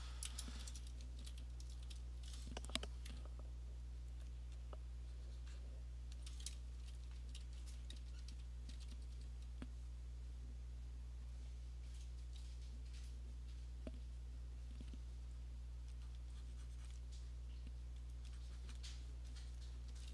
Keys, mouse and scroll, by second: 1.2 ', 1.7 ', 4.2 alt+click, 6.2 alt+click, 6.8-9.1 typing, 7.7 click, 9.8 click, 12.3 [, 15.6 click, 16.2 click, 16.5 click, 16.9 click, 18.1 click, 18.8 click, 19.6 click, 19.9 [.